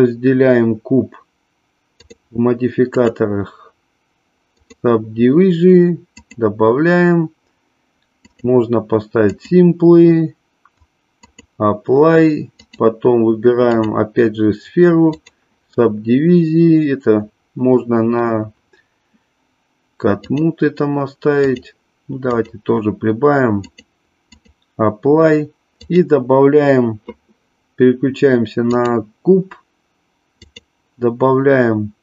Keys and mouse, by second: 2.9-4.8 drag, 6.1 click, 8.2 click, 9.2-11.5 drag, 13.8-15.4 drag, 20.3-21.7 drag, 23.5-24.7 drag, 25.8 click, 30.5-32.0 drag.